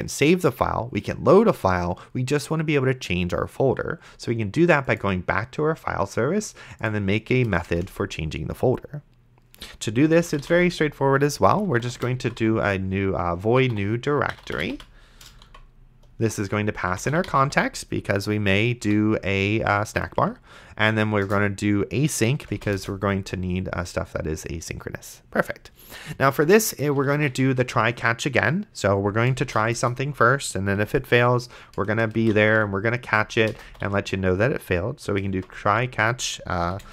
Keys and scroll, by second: 7.8 Return, 10.0-17.9 typing, 18.8 End, 20.0 space, 20.1 a, 21.3 Return, 22.4 space, 22.8 Return, 26.8-27.8 typing, 29.2 space, 29.7 shift+[, 29.8 Return, 30.8 Down, 32.1-36.9 typing, 36.7 End.